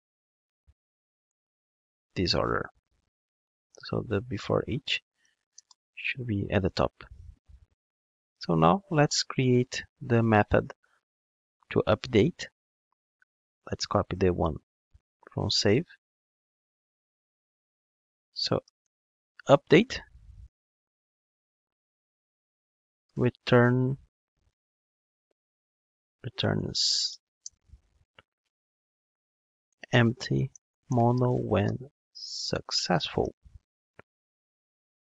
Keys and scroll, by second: 0.4 alt+shift+Down, 14.8 super+c, 16.9 super+v, 20.9 alt+shift+Right, 25.7 alt+shift+Right, 27.0 alt+shift+Left.